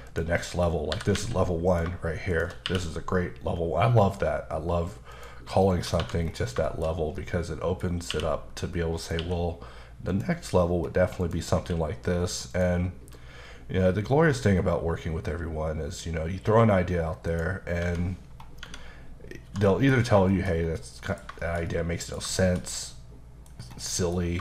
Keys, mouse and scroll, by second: 0.1 click, 0.4 middle click, 0.7 scroll up 2, 0.9 typing, 1.7 click, 2.3 shift+click, 2.7 q, 5.1 click, 5.7 middle click, 6.0 1, 6.2-6.6 scroll down 2, 6.6 shift+middle click, 6.9 scroll down 2, 7.2 middle click, 7.8 scroll up 1, 8.1 q, 9.0 click, 9.2 q, 10.1 click, 11.2 click, 11.5 q, 12.5 click, 17.3 click, 17.8 Tab, 18.6 Tab, 19.5 1, 19.7 middle click, 20.0 scroll down 2, 20.3 shift+middle click, 20.6 scroll down 2, 20.8 middle click, 21.4 shift+middle click, 22.4 shift+middle click, 23.6 scroll up 1, 23.9 middle click, 24.2 scroll up 1.